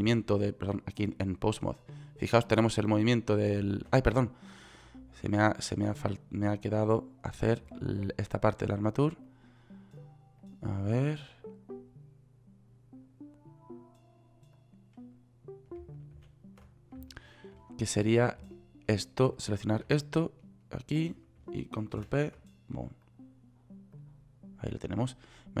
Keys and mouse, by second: 0.6 ctrl+z, 4.4 ctrl+z, 16.8 ctrl+z, 22.5 ctrl+p.